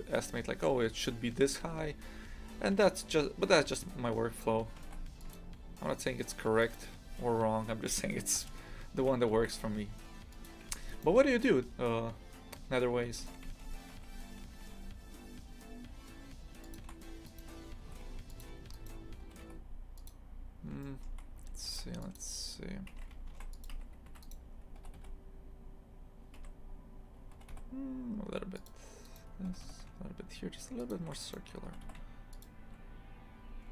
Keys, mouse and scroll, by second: 2.4-4.9 scroll up 1, 4.9 ctrl+r, 7.1 s, 9.4 ctrl+r, 10.7 1, 10.9 right click, 13.2 g, 17.3 right click, 17.8 g, 18.8 right click, 19.3 g, 20.9 shift+middle click, 21.4 a, 21.7 ctrl+r, 22.9 Escape, 23.3 ctrl+r, 24.1 1, 24.3 right click, 24.8 g, 27.4 g, 29.1 right click, 29.5 g, 31.2 right click, 31.7 g, 33.5 a.